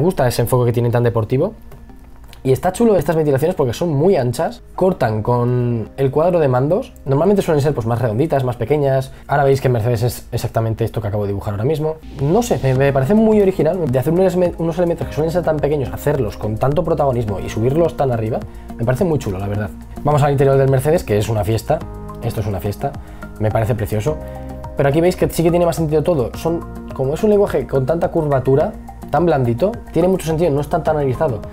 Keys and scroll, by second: 2.0 ctrl+z, 7.2 ctrl+z, 10.9 ctrl+z, 11.7 e, 12.0 b, 22.7 b.